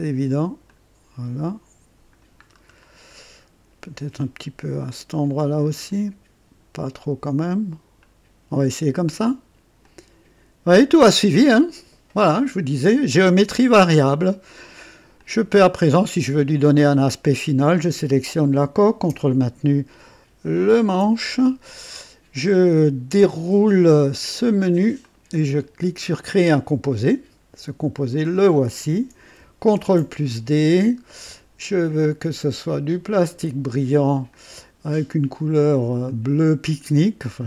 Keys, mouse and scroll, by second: 0.6-2.3 drag, 2.4-2.7 scroll down 1, 3.1-3.7 right drag, 3.8 scroll up 1, 5.8 click, 9.7 click, 11.0-14.0 drag, 14.2 right click, 15.1 click, 17.9 click, 20.6 ctrl+click, 24.9 click, 26.2 click, 28.0 click, 29.7 ctrl+d, 31.0 click, 32.4 click, 34.2 click, 36.0 click, 37.3 click.